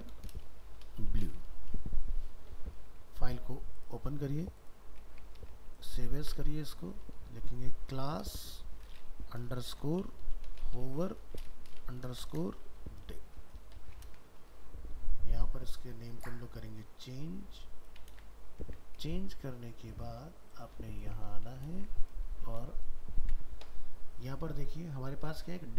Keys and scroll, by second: 2.7 ctrl+s, 5.4 ctrl+Tab, 6.2 alt+f, 6.3 alt+移, 14.0 ctrl+c, 18.1 ctrl+v, 21.7 ctrl+c, 22.3 ctrl+a.